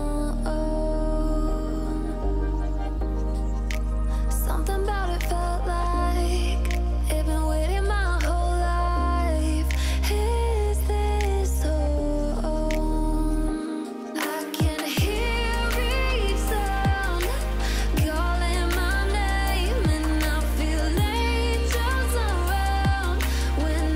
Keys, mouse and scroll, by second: 0.0-0.3 typing, 0.6 click, 1.5 click, 3.9-4.4 alt+shift+click, 4.7-5.2 click, 8.4-8.7 alt+scroll down 1, 9.1 alt+scroll up 1, 9.5 click, 9.7 alt+scroll up 1, 9.9-11.1 drag, 15.3 alt+scroll up 1, 15.6-15.9 click, 16.0 alt+scroll down 2, 17.2 click, 17.6 ctrl+z, 18.1 click, 18.7 shift+click, 20.6 ctrl+z, 21.0 click.